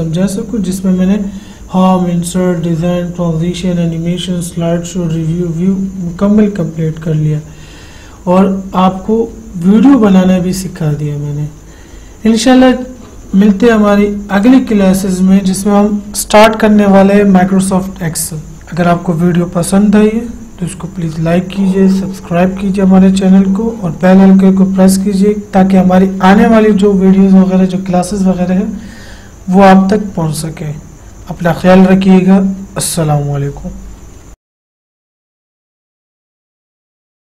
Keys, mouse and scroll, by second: 14.5 click.